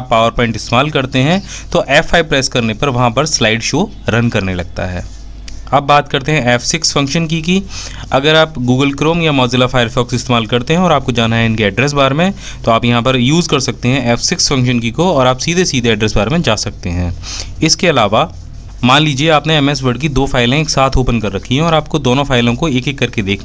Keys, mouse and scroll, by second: 5.9 F5, 6.1-6.5 typing, 16.5-17.2 typing, 19.0-20.8 typing, 20.9 ctrl+shift+F6.